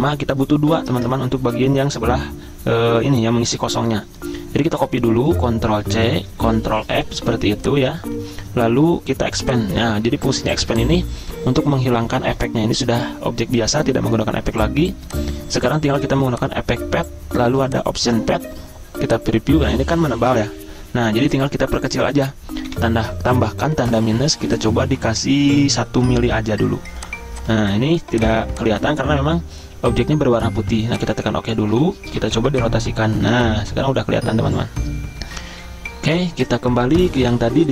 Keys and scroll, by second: 0.9 ctrl+z, 5.7 ctrl+c, 6.7 ctrl+f, 8.2 ctrl+z, 22.7 -, 26.2 1, 32.2 r.